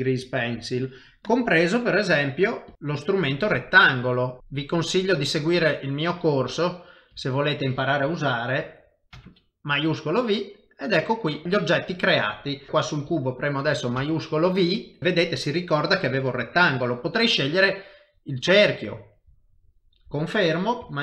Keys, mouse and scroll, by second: 1.2 click, 4.6 click, 10.0 middle click, 12.7 middle click, 12.7 click, 14.0 shift+v, 16.6 click.